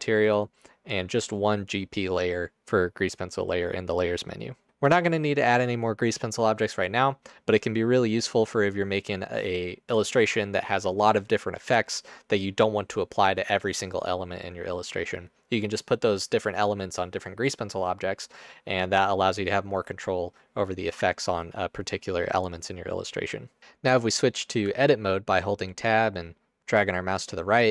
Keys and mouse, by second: 23.6 Tab, 24.8 Tab.